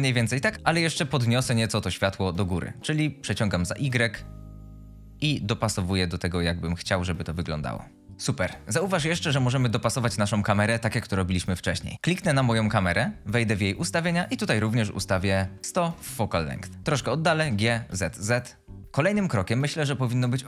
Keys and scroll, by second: 11.9 t, 15.1 typing, 15.8 Return, 16.7-17.8 typing.